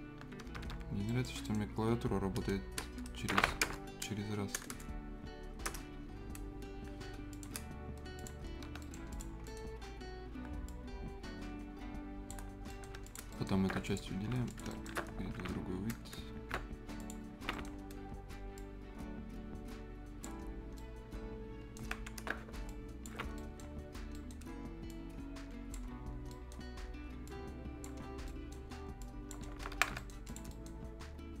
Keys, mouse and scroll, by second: 0.2 Escape, 0.9 scroll up 1, 1.1 right click, 1.3 scroll down 1, 1.4 right click, 4.6 BackSpace, 5.7 Return, 6.1 scroll down 1, 6.4-7.3 scroll up 1, 7.3 click, 7.7 scroll up 1, 8.2 click, 8.5 scroll down 1, 8.7 Escape, 8.8 right click, 9.1 click, 9.3-9.7 scroll up 2, 9.4 right click, 10.7-12.4 drag, 12.4 shift+scroll up 1, 12.7 right click, 12.9 Escape, 13.0 click, 13.3 right click, 13.6 scroll up 1, 13.8 ctrl+click, 14.2 ctrl+shift+scroll down 1, 14.5 shift+click, 14.7 shift+right click, 15.2 alt+s, 17.0 ctrl+click, 17.4 ctrl+shift+scroll down 1, 17.5 shift+right click, 17.7-18.3 shift+scroll up 1, 18.5-20.6 shift+drag, 20.6 shift+scroll down 1, 20.7 shift+right click, 21.8 shift+Escape, 21.9 shift+scroll up 1, 22.7 ctrl+click, 23.3 ctrl+right click, 23.6-23.9 scroll down 1, 23.9-24.4 scroll up 2, 24.1 right click, 24.9 click, 25.8 scroll down 1, 26.3 right click, 26.6 scroll up 1, 27.2 click, 28.0 scroll down 1, 28.2 right click, 28.6 scroll up 1, 29.0 click, 29.4-29.8 scroll down 2, 29.5 Escape, 29.9 Escape, 29.9 right click, 30.2 click, 30.5 right click, 30.8-31.4 scroll up 1.